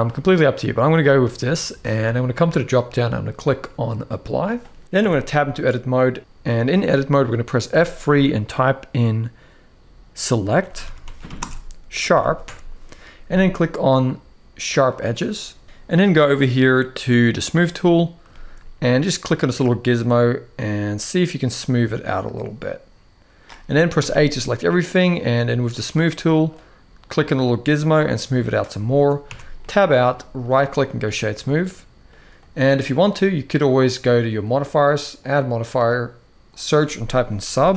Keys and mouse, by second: 2.2-3.9 drag, 4.8 Tab, 5.1 middle click, 6.4 middle click, 7.5 F3, 17.0 click, 18.0 shift+middle click, 19.0-23.2 drag, 23.7 a, 26.3-28.3 drag, 29.0 Tab, 29.3-29.8 middle drag, 30.2-30.7 right drag, 31.2-31.8 middle drag, 35.0-37.7 drag.